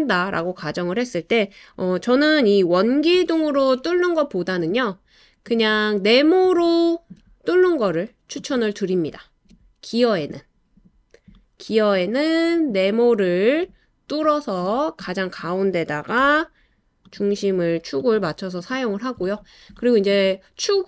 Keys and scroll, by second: 3.2 BackSpace, 16.2 l.